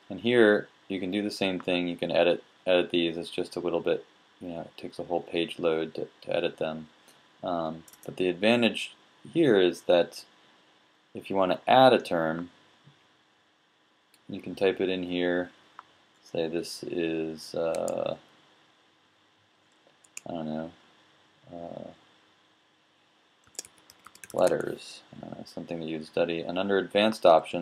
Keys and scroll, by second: 24.0-25.8 typing.